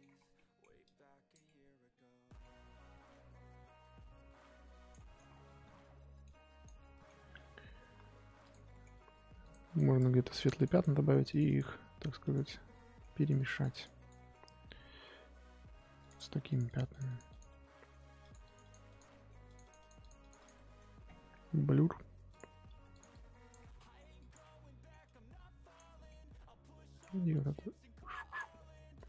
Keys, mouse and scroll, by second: 0.0 scroll up 1, 0.3 middle click, 0.8 click, 1.4-3.1 middle drag, 3.1-4.9 drag, 4.9 middle click, 5.3 scroll down 1, 5.4 middle click, 5.8-6.2 scroll down 1, 6.2 click, 6.7 middle click, 7.3-8.5 scroll up 2, 8.5 click, 8.7 middle click, 8.8 scroll down 1, 8.9-9.4 scroll up 1, 9.4 click, 10.2 ctrl+z, 10.3 click, 10.9 middle click, 11.3 click, 11.7 middle click, 12.2 click, 12.4 middle click, 13.1-14.2 drag, 14.2-16.0 middle drag, 16.0 click, 16.5 click, 17.4 middle click, 18.2 click, 19.0 middle click, 19.4-20.5 drag, 20.5-22.3 middle drag, 22.3 click, 22.6 f, 23.1 click, 23.5 middle click, 24.2 click, 24.4 middle click, 25.0 click, 25.8-27.0 middle drag, 27.0-28.5 drag, 28.5 middle click, 28.9 click.